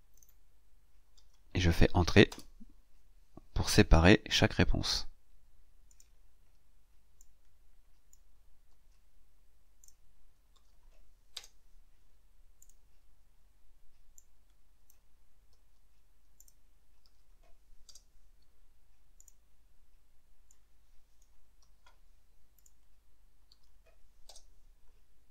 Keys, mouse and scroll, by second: 0.0 click, 1.0 ctrl+v, 2.1 Return, 5.7 click, 7.1 click, 8.5 ctrl+c, 9.7 click, 10.4 ctrl+v, 11.2 Return, 12.5 click, 14.0 click, 15.4 ctrl+c, 16.2 click, 16.9 ctrl+v, 17.7 Return, 19.0 click, 20.3 click, 21.5 ctrl+c, 22.4 click, 23.3 ctrl+v, 24.1 Return.